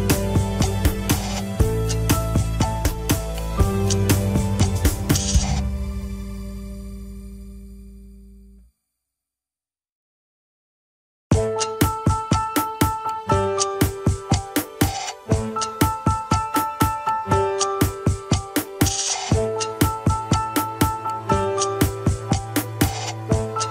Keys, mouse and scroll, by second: 2.3-5.3 middle drag, 5.3-5.8 scroll down 3, 5.8 KP_1, 6.7 ctrl+s, 7.2 a, 7.6 alt+r, 7.9 alt+g, 8.4 scroll up 2, 8.9-10.0 shift+middle drag, 10.0 click, 11.2 click, 11.6 r, 14.1-15.9 middle drag, 15.9 scroll down 3, 16.0 KP_1, 16.8 a, 17.1 alt+r, 17.5 alt+g, 18.0 ctrl+s, 18.4-19.1 shift+middle drag, 19.1 KP_3, 20.0-20.6 drag, 20.9 shift+middle click, 21.3 scroll up 2, 22.0 g.